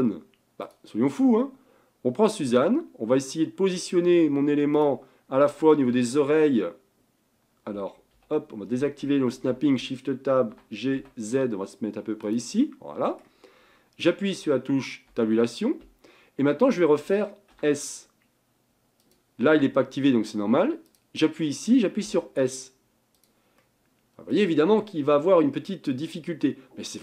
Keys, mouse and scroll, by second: 1.6-4.5 middle drag, 4.7 click, 5.9 g, 9.3 shift+Tab, 10.5 g, 12.6-15.1 middle drag, 15.1 Tab, 17.6 s, 20.9 click, 22.2 s, 23.6-24.6 middle drag, 24.6-25.1 scroll up 5, 25.2-27.0 middle drag.